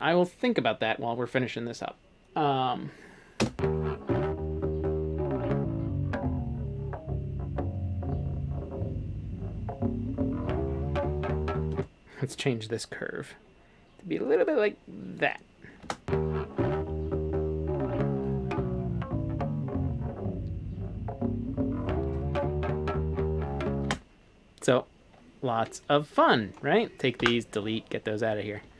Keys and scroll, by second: 3.4 space, 11.7 space, 15.8 space, 23.9 space, 27.2 Delete, 28.3-28.7 typing.